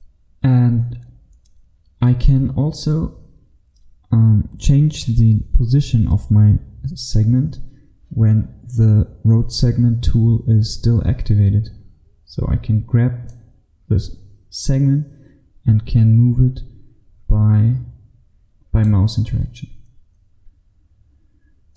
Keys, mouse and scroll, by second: 13.3 click, 15.1 click.